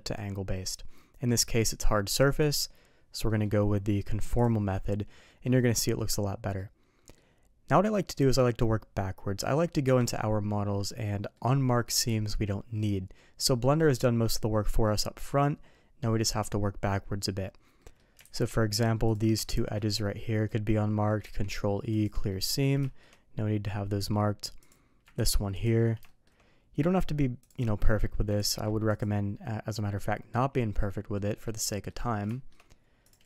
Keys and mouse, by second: 3.2 middle click, 4.4 click, 5.3 middle click, 5.8 middle click, 6.5-7.1 middle drag, 9.8 KP_Divide, 10.7 middle click, 13.3 middle click, 17.8 middle click, 18.2 alt+a, 18.5 shift+middle click, 19.0 click, 19.4 shift+click, 21.2 ctrl+e, 22.3 middle click, 22.8 shift+middle click, 24.0 middle click, 24.6 click, 25.1 ctrl+e, 26.0 shift+middle click, 27.4 click, 27.8 middle click, 28.3 ctrl+e, 31.1 middle click, 31.7 middle click, 32.3 shift+middle drag, 33.0 click.